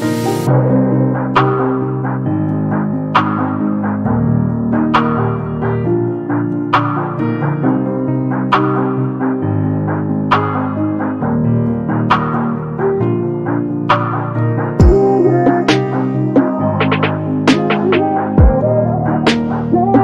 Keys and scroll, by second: 11.4 space.